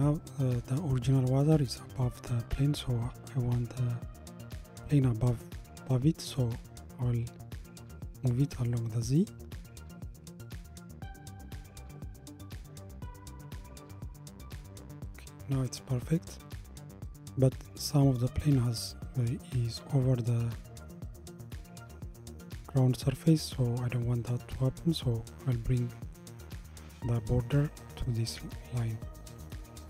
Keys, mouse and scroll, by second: 7.2 g, 16.6-17.3 middle drag, 17.3-18.0 scroll up 2, 18.0-20.9 middle drag, 22.8-25.7 middle drag.